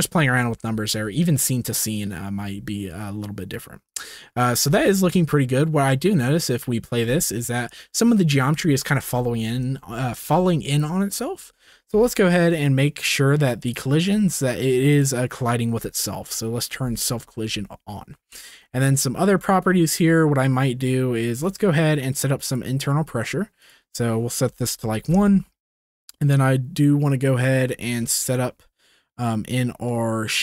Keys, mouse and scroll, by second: 0.2 ctrl+s, 3.9 click, 4.6 space, 9.5 space, 10.2 ctrl+s, 14.9 click, 22.5 click, 23.6-25.0 drag.